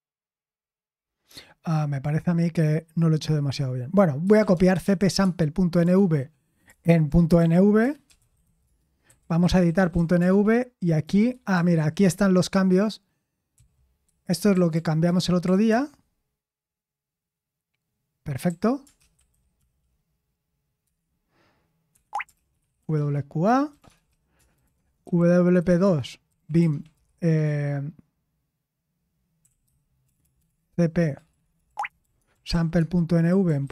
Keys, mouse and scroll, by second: 4.2-5.8 typing, 6.7 ctrl+p, 7.1-11.7 typing, 13.3-16.1 typing, 20.8 Return, 20.8 typing, 21.9 Escape, 22.1-27.4 typing, 29.1-33.7 typing.